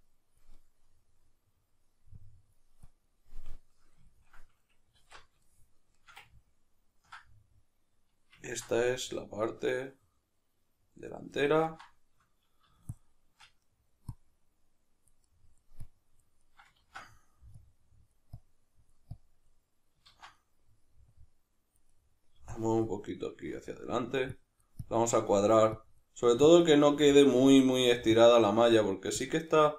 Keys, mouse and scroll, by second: 0.5-2.1 middle drag, 2.1-3.3 drag, 3.3-12.9 middle drag, 5.0 alt+q, 12.9 shift+click, 13.7 middle click, 14.1-15.3 drag, 15.3 middle click, 15.8 click, 16.4-17.6 middle drag, 16.8 ctrl+z, 17.6-20.4 drag, 20.1 ctrl+z, 20.4 middle click, 21.1 click, 21.9 middle click, 22.5 click, 23.2-24.3 middle drag, 24.3 click, 25.2 middle click, 25.7-26.8 drag, 26.8-28.1 middle drag, 28.1-29.4 drag, 29.4-29.7 middle drag.